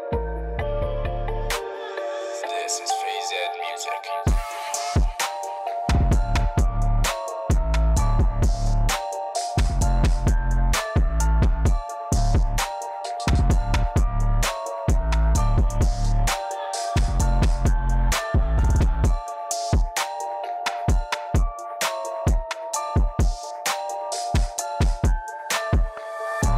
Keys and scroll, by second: 0.0-1.0 typing, 5.7-8.4 typing, 9.3 Escape, 12.8 e, 14.0-14.5 typing, 14.5 Return, 16.6-17.5 typing, 20.4-21.9 typing.